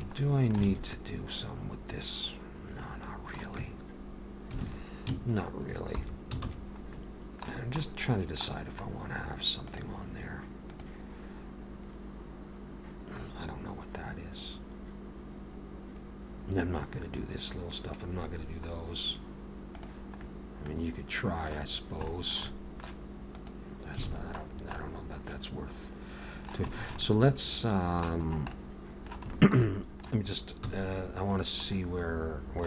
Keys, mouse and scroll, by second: 0.0 Tab, 0.2 middle click, 0.7 alt+a, 1.0 middle click, 3.6 Tab, 4.6 alt+a, 5.8 alt+h, 6.5 alt+a, 6.9 middle click, 7.6 scroll down 1, 7.8 middle click, 8.9-9.3 scroll down 1, 20.2 middle click, 20.7-21.7 scroll down 4, 21.2 middle click, 21.7-22.0 scroll down 2, 22.1 shift+middle click, 22.5 middle click, 23.4 click, 24.1 alt+a, 24.5-25.0 scroll down 2, 24.8 middle click, 26.7 shift+middle click, 27.0 middle click, 28.3-29.1 scroll up 2, 28.5 middle click, 29.3 shift+middle click, 29.7 middle click, 30.7 z, 31.7 middle click.